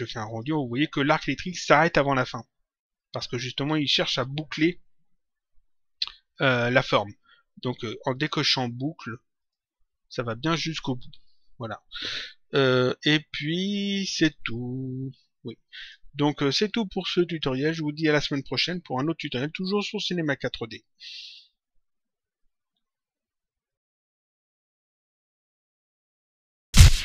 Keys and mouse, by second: 8.1 click, 9.4 click, 15.7 click, 17.2 click, 23.6 click.